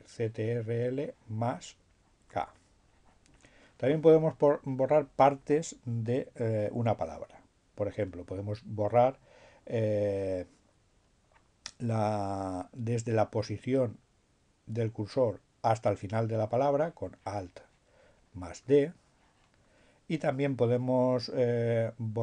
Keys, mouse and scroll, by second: 1.8-2.9 drag, 3.0-4.2 drag, 16.8-19.2 drag.